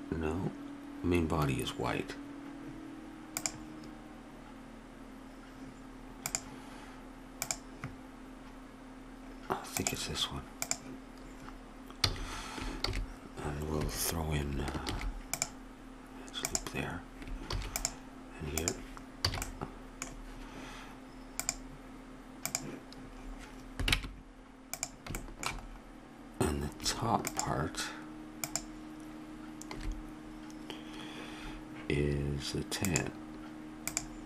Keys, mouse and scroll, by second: 3.4-5.2 drag, 6.2-9.1 drag, 10.6-12.1 drag, 12.1 a, 12.9 ctrl+e, 14.9 ctrl+r, 17.5 ctrl+r, 19.2 a, 24.0 ctrl+Tab.